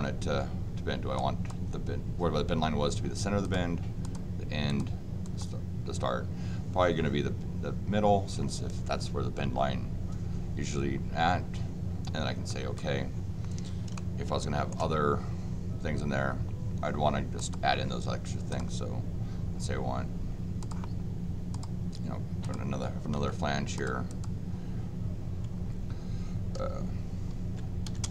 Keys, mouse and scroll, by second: 1.1 click, 3.4 click, 4.0 click, 4.6 click, 5.2 click, 12.5 click, 13.9 shift+middle click, 17.3 click, 18.5 click, 20.6 click, 21.5 click, 22.4 click, 23.2 d, 23.7 click, 24.1 click.